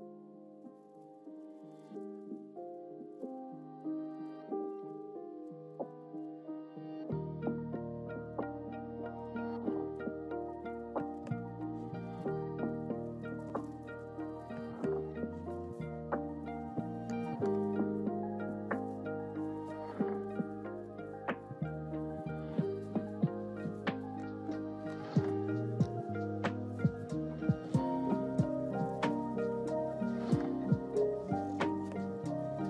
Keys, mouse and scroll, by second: 13.8 click, 21.9 click, 22.5 click, 23.0 click, 26.6 click, 28.6 click, 29.8 click.